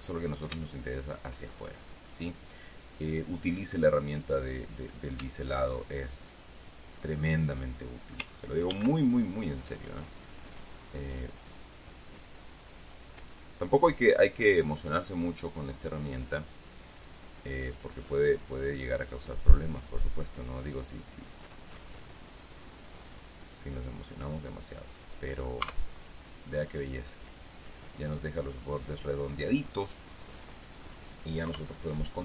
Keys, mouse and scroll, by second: 0.5-1.2 scroll down 1, 1.2 shift+middle click, 2.6-4.5 middle drag, 5.3 right click, 6.3 shift+right click, 9.3 ctrl+b, 24.9 click, 25.5 middle click, 26.2 Tab, 26.8-27.1 scroll down 2, 27.1-28.9 middle drag, 28.9-29.4 scroll down 1, 29.4-30.4 middle drag, 31.0 middle click, 32.0 KP_3.